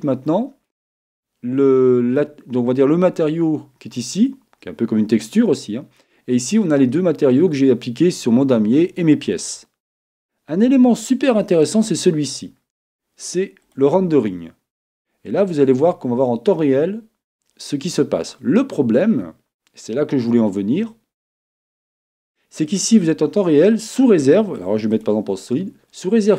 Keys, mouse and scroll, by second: 11.6-13.3 drag, 22.7-24.6 drag.